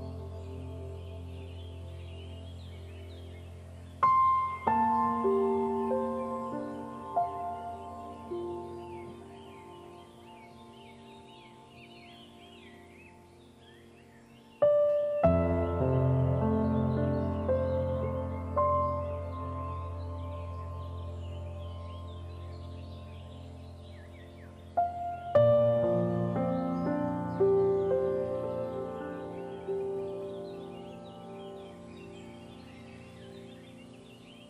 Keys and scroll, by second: 13.9 ctrl+z, 19.9 ctrl+z, 30.5 ctrl+0, 31.1 ctrl+g.